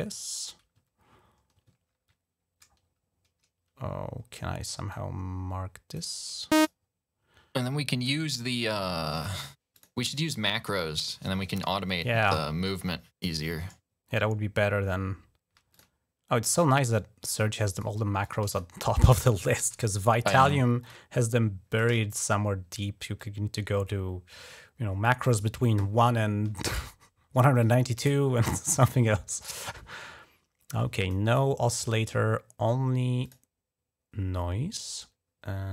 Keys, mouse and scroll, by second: 1.8 scroll up 2, 4.7-5.8 drag, 6.3 e, 6.4 click, 7.4 click, 8.2 ctrl+scroll down 1, 8.6 ctrl+scroll up 2, 9.6 click, 12.1 click, 12.4 click, 15.5 click, 16.8 click, 17.6 click, 18.1 click, 19.5 ctrl+s, 20.2 d, 20.6 click, 21.5 click, 22.0 click, 23.0-25.1 drag, 27.5-29.4 drag, 30.8 click, 31.1 click, 33.1 click.